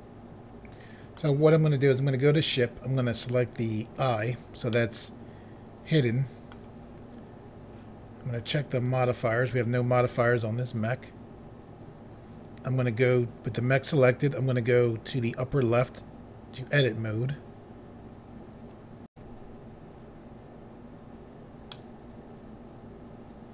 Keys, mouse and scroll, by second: 1.1 middle click, 3.8 click, 4.7 middle click, 8.8 click, 15.5 click, 16.5 click, 19.1 Pause, 21.7 middle click.